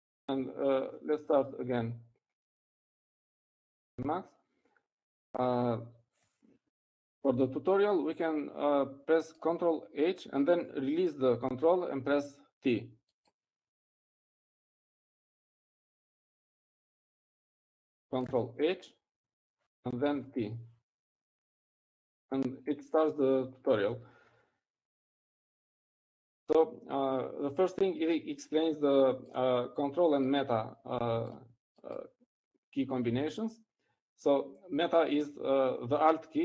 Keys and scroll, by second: 0.4 ctrl+x, 0.4 ctrl+c.